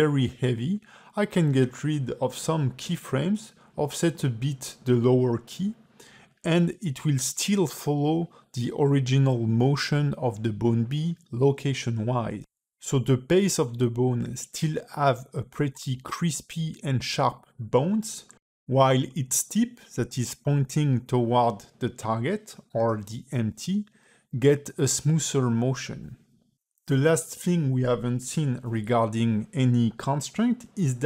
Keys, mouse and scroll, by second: 2.6 space, 3.2 g, 4.7 click, 5.1 g, 6.4 space, 8.3 space, 8.7 click, 11.1 click, 11.8 x, 14.4 click, 14.6 g, 15.8 click, 16.2 g, 17.8 click, 18.2 click, 18.8 x, 19.4 space, 22.0 a, 22.4 g, 28.1 space, 28.7 ctrl+Tab, 29.6 click, 30.1 ctrl+Tab, 30.3 click.